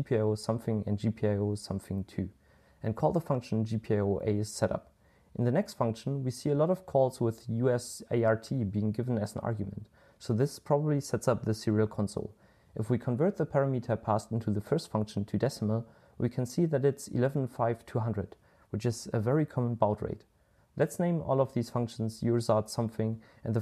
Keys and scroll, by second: 0.7-1.4 typing, 16.6-23.6 typing.